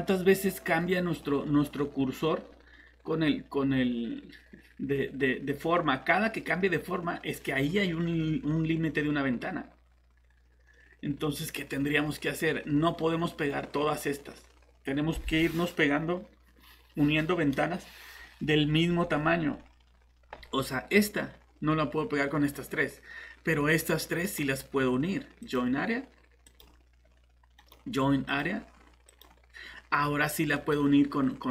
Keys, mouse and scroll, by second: 24.2 right click, 25.4 click, 27.6 right click, 28.3 click, 30.5 right click.